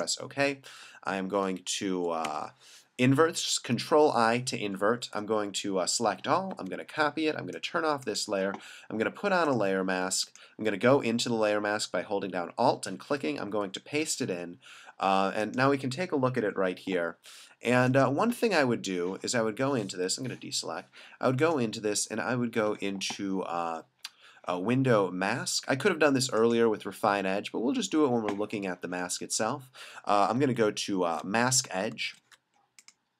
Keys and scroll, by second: 2.3 super+i, 5.0 super+a, 6.5 super+c, 13.5 super+v, 20.1 super+d, 30.3 alt+super+=, 32.2 alt+super+-.